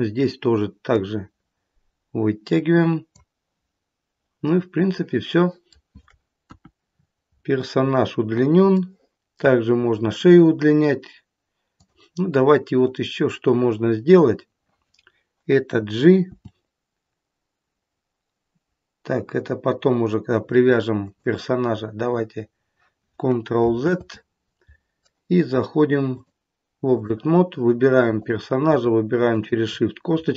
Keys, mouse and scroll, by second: 0.9 click, 4.9 middle click, 5.2 middle click, 6.4 KP_1, 6.9-7.6 scroll down 6, 8.7 shift+middle click, 10.2-10.6 scroll up 3, 11.6 click, 12.4 scroll up 2, 16.2 g, 23.7 ctrl+z, 26.1 click, 28.1 click, 29.2 shift+click.